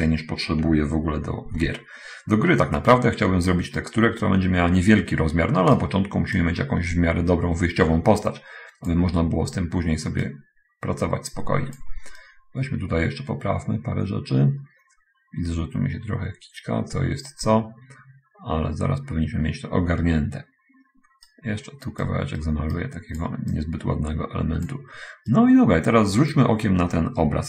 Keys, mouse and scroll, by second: 1.9 n, 3.2-6.4 right drag, 6.8-9.5 drag, 10.7-12.3 drag, 12.6-21.9 right drag, 22.3 click, 22.7 right click, 23.8-24.9 drag, 25.7-26.6 right drag.